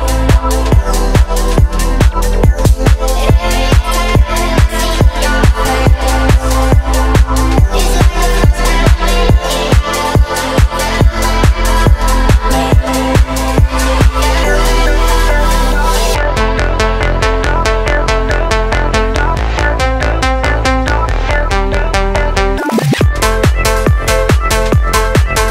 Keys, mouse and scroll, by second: 0.0-0.6 scroll down 2, 0.7 shift+middle click, 1.1 shift+a, 4.7 scroll down 1, 5.0-5.7 shift+middle drag, 6.5 g, 6.9 z, 8.7 click, 10.3 click, 12.7 click, 13.7 shift+click, 14.8 shift+click, 16.4 ctrl+p, 17.7 click, 19.3 r, 23.4 right click.